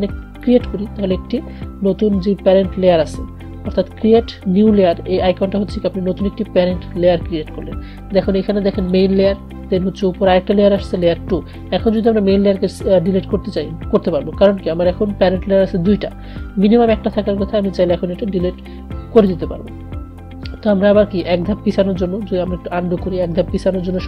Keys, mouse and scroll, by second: 0.6 click, 9.0 click, 17.8 click.